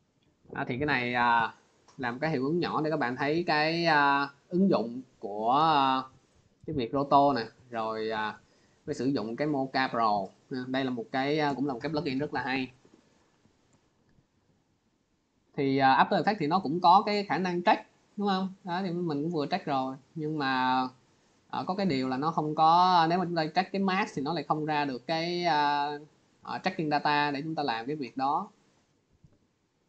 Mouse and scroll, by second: 1.8 scroll, 2.9 click, 7.9 click, 9.4 click, 11.0 click, 16.4 click, 17.7 click, 18.5 click, 19.4 click, 20.9 click, 21.5 click, 22.5 click, 24.5 click, 26.4 click, 26.9 click.